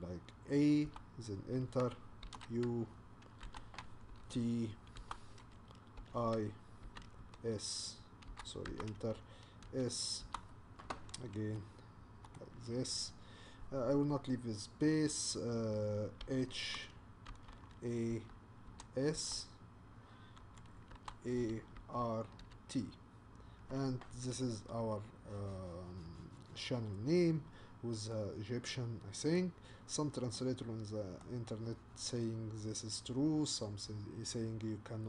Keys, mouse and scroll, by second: 0.8 Return, 2.2 shift+u, 3.4 Return, 4.1 shift+t, 5.0 Return, 6.0 i, 7.2 s, 8.3 BackSpace, 8.7 Return, 9.6 s, 10.2 Return, 11.6-12.7 shift+middle drag, 12.7-13.3 scroll down 1, 14.9-16.2 scroll down 1, 16.2 h, 17.3 Return, 17.6 a, 18.1 Return, 18.7 s, 19.1 Return, 20.4 a, 20.9 Return, 21.4 r, 21.8 Return, 22.4 t, 24.5-26.1 scroll down 1, 26.1-28.1 scroll down 2, 28.1-29.6 middle drag, 29.6-30.4 scroll up 2, 30.4-35.0 middle drag.